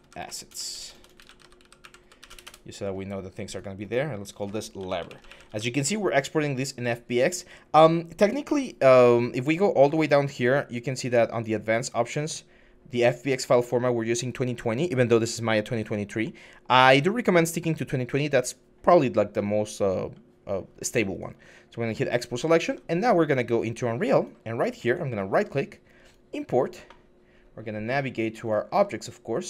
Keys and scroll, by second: 0.0-2.0 typing, 2.1 Return, 2.2 Return, 4.3-5.4 typing, 7.3 typing, 22.4 alt+Tab, 23.4 alt+Tab.